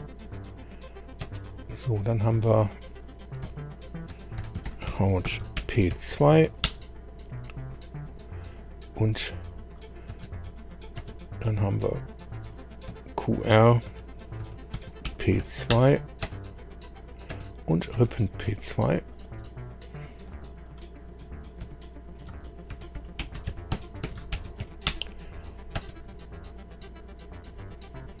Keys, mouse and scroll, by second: 0.3 click, 1.2 space, 3.4 F2, 4.1-6.4 typing, 6.6 Return, 8.1 click, 9.8 click, 10.1 space, 10.6 click, 11.0 space, 12.9 F2, 13.9-16.2 typing, 16.8 click, 17.3 space, 18.0 space, 19.1 click, 19.4 2, 20.6 click, 21.6 F2, 22.5-25.8 typing, 27.5-27.8 scroll down 2, 28.1 scroll down 2.